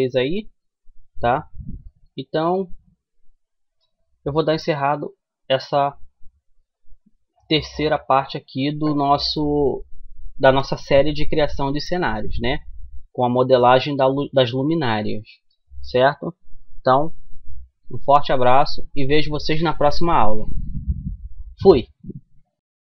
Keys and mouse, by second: 4.8-6.8 drag, 16.4-22.1 middle drag.